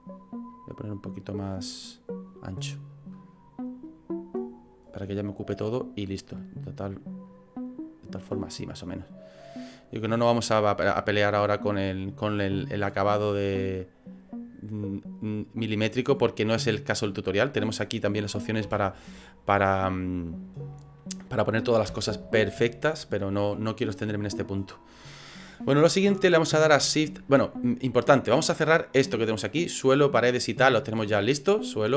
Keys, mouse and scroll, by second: 0.5 click, 2.9 click, 3.8 click, 7.3 click, 8.6 middle click, 12.0 click, 13.3 click, 16.2 middle click, 16.9 scroll down 4, 18.7 n, 19.7 click, 21.9 n, 23.3 middle click, 23.9 right click.